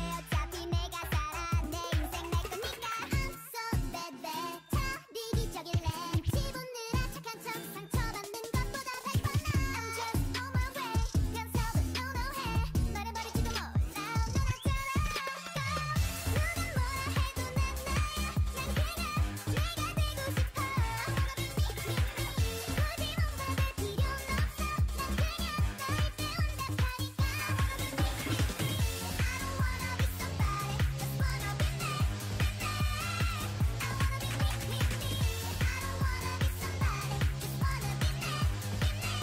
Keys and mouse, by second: 1.1 click, 3.6 right click, 4.0 s, 5.1 s, 6.2 g, 9.9 a, 12.5 ctrl+Tab, 13.7-15.1 drag, 15.8 x, 16.6 ctrl+z, 16.8 x, 19.6-21.5 drag, 21.5 middle click, 21.6-22.7 right drag, 22.7-23.7 drag, 24.5-26.8 drag, 25.8 g, 28.7-31.6 drag, 30.5 g, 33.4-37.3 drag, 36.2 g, 38.2 Tab.